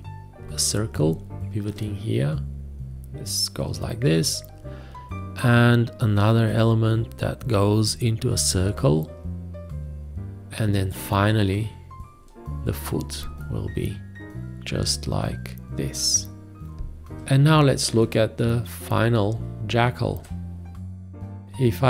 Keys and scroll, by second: 18.0 space.